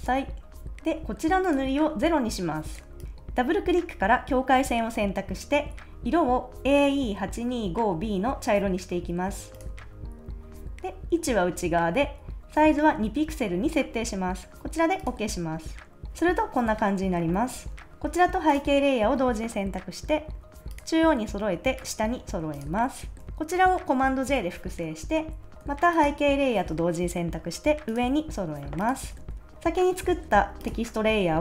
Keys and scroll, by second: 22.9 super+s, 24.2 super+j, 29.2 super+s.